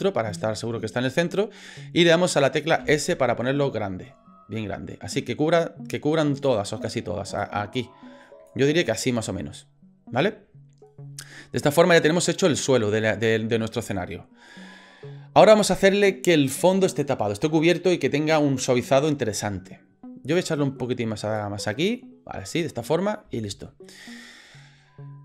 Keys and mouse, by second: 2.8 s, 7.4-8.5 drag, 20.5 click, 22.6 middle click, 23.4 shift+middle click, 24.0 shift+middle click.